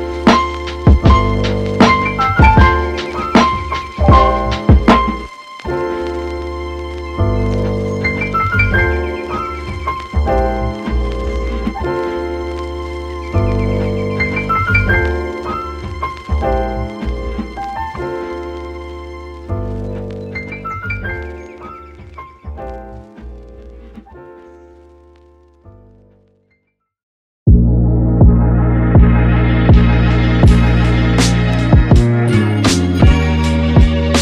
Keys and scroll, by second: 14.0 space, 16.5 space, 33.0 super+s, 34.1-34.2 typing.